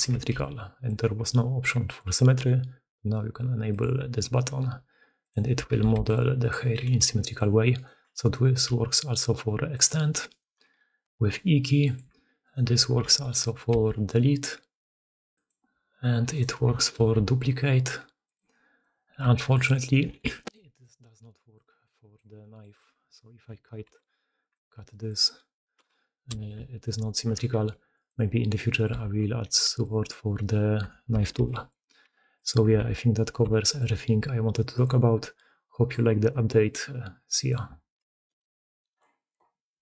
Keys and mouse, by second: 0.2 b, 1.3 g, 3.6 click, 5.6 alt+a, 5.8 b, 6.8 g, 7.7-8.6 drag, 8.6 e, 10.3 click, 10.5 e, 12.4-13.1 drag, 13.1 g, 13.6 x, 16.3 click, 17.2 shift+d, 19.3 g, 20.1 alt+a, 20.3 middle click, 20.5 shift+middle click, 21.1 b, 22.3 click, 23.7 k, 28.5-28.8 drag, 29.0 alt+a, 29.5 b, 31.0 alt+a, 31.3 b, 32.1 g, 32.7 alt+a, 32.9-33.3 middle drag, 33.5 shift+middle drag, 34.7 middle click, 35.4-35.8 middle drag, 36.0-36.4 middle drag, 38.1 ctrl+shift+Insert.